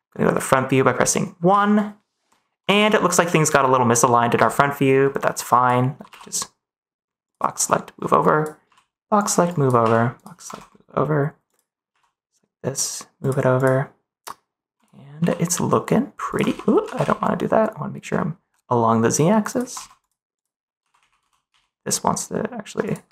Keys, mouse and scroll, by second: 2.6 ctrl+s, 2.9-4.2 middle drag, 5.4 click, 6.0 g, 7.2 click, 8.2 click, 8.6 g, 9.4 click, 9.7 g, 10.1 click, 10.4 ctrl+s, 11.4 click, 11.8 g, 13.5 click, 14.7 click, 15.1 g, 16.2 click, 16.4 ctrl+z, 16.8 g, 16.9 z, 19.7 ctrl+s, 20.0 click, 20.7 g, 20.9 z, 21.1 x, 21.4 z, 22.8 click.